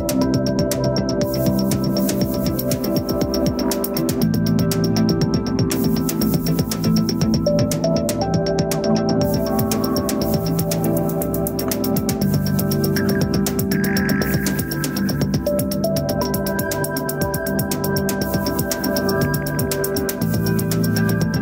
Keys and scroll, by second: 5.4 ctrl+d.